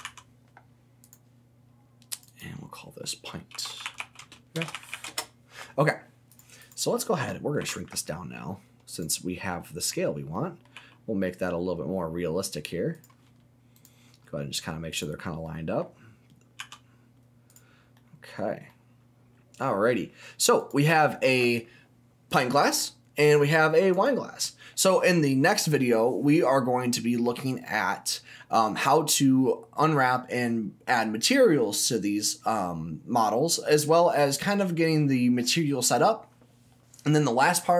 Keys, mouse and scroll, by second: 0.0 s, 2.1 click, 2.2-5.8 drag, 6.3 click, 6.6 click, 7.6 s, 8.9 click, 9.2 scroll down 1, 9.4 middle click, 10.3 middle click, 10.7 g, 12.9 click, 13.7 click, 14.2-14.9 scroll up 2, 14.9 click, 15.4 middle click, 16.6 s, 17.5 click, 17.8 scroll down 1, 17.9 middle click, 18.6 middle click, 19.9 middle click, 20.6 click, 21.0-22.3 scroll up 1, 22.3 click, 23.9 click.